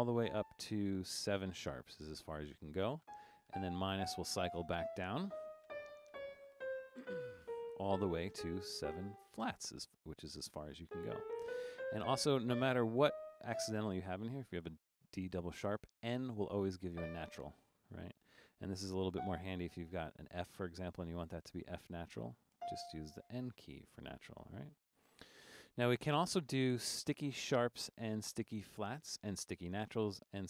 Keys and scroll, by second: 0.0-0.7 typing, 2.8-3.6 typing, 5.6-9.3 typing, 10.9-13.5 typing, 17.0 n, 19.1 f, 22.6 n, 25.0 BackSpace, 25.4 BackSpace, 27.3 Down.